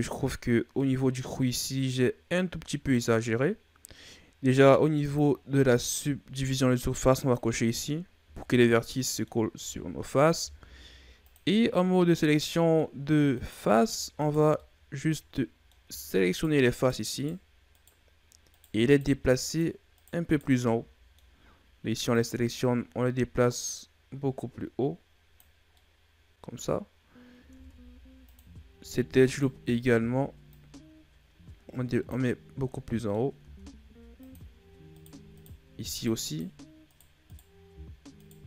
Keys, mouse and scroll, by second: 0.7-1.8 middle drag, 1.8-4.8 scroll up 1, 4.9 click, 8.1 Tab, 8.6-10.3 middle drag, 10.3 ctrl+Tab, 11.7-13.3 middle drag, 13.3 right click, 14.1 shift+right click, 14.5-16.2 middle drag, 16.2 shift+right click, 16.6 shift+right click, 17.1 shift+right click, 17.6 shift+right click, 18.4 shift+right click, 18.8 shift+right click, 19.4 shift+right click, 19.8 shift+right click, 20.2 shift+right click, 20.5 middle click, 21.3-22.0 scroll up 1, 22.0 click, 25.6-27.5 middle drag, 27.5 ctrl+Tab, 29.1 alt+right click, 30.4 click, 32.7 middle click, 33.3 ctrl+Tab, 34.8 right click, 35.2 shift+right click, 35.8 shift+right click, 36.2 shift+right click, 36.8 shift+right click, 37.2 shift+right click, 38.1 shift+right click.